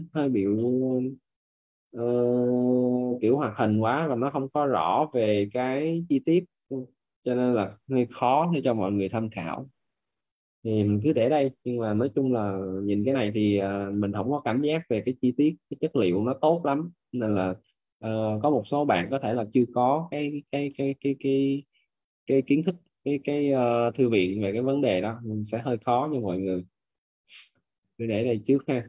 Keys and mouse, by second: 0.4 middle click, 11.3 middle click, 13.7 middle click, 16.3 middle click, 17.8 click, 18.7 middle click.